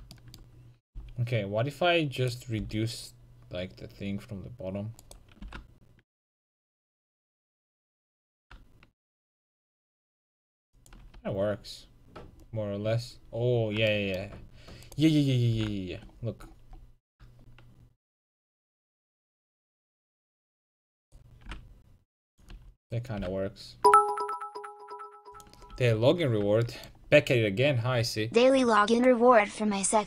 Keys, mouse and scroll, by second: 1.0 c, 2.3-5.5 drag, 2.6 c, 5.5 s, 11.3 a, 15.2-18.8 right drag, 15.6 g, 20.3-22.4 drag, 20.5 a, 21.1-24.7 right drag, 21.5 g, 22.6 a, 23.2 g, 25.5-27.2 drag, 25.8 a.